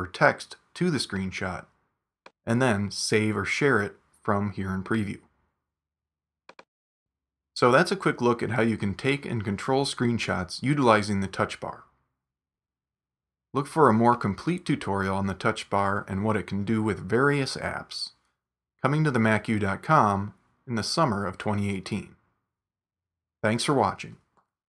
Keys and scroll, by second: 12.8 super+w.